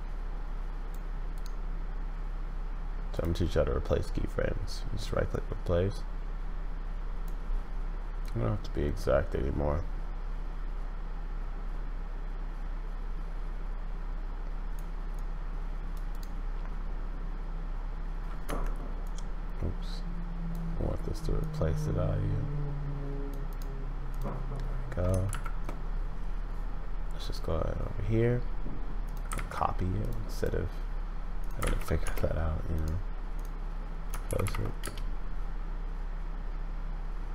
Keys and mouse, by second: 18.4 Escape, 23.3 middle click, 24.2-25.5 middle drag, 25.3 shift+Right, 27.2 click, 34.2 shift+Left, 34.4 shift+Left, 34.8 space.